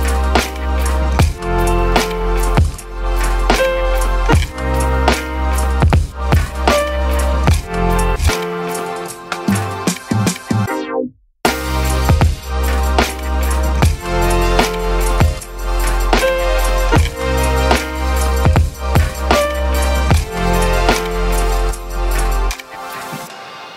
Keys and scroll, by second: 1.2 ctrl+z, 3.4 ctrl+z, 3.5 ctrl+z, 19.4 ctrl+1, 19.4-20.9 typing, 21.1 ctrl+1.